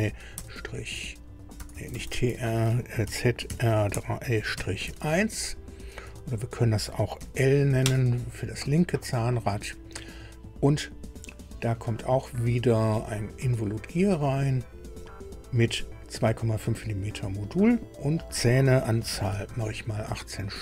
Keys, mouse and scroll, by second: 1.5-5.4 typing, 6.4 BackSpace, 7.1 shift+l, 7.8 Return, 12.4 click, 14.1 click, 17.7 click, 18.9 KP_1, 19.3 KP_8.